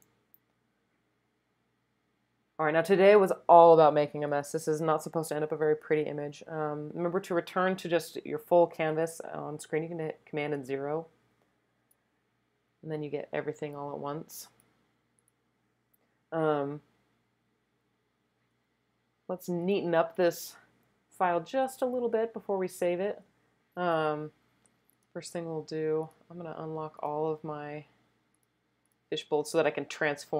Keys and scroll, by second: 10.6 super+0.